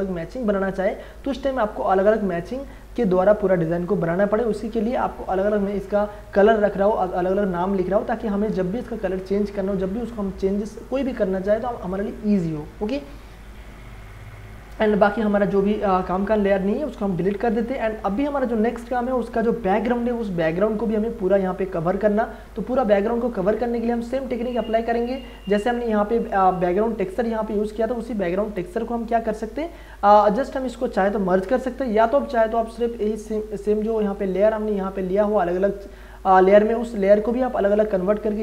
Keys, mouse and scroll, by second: 6.4 click, 14.1 v, 14.7 click, 15.4 shift+click, 16.0 right click, 17.2 click, 22.2-23.4 scroll down 1, 24.9 click, 27.1 click, 35.2 click.